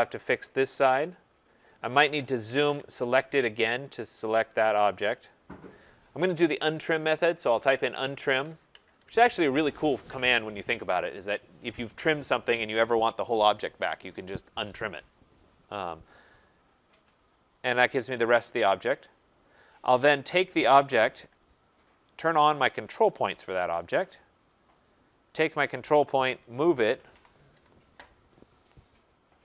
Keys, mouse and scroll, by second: 1.4 click, 2.4 z, 2.5 Return, 2.5 scroll down 10, 2.7 s, 2.8 Return, 3.6 scroll down 4, 4.3-6.4 scroll up 6, 4.4 z, 6.9-9.2 typing, 8.3 scroll, 17.1-23.3 drag, 20.7 Return, 25.3 click, 26.1-28.3 typing.